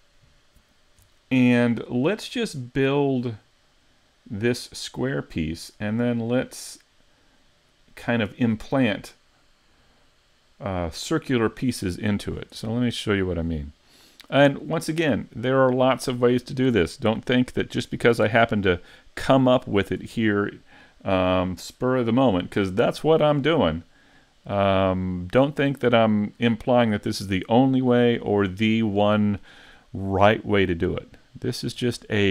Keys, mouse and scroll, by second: 13.2 click.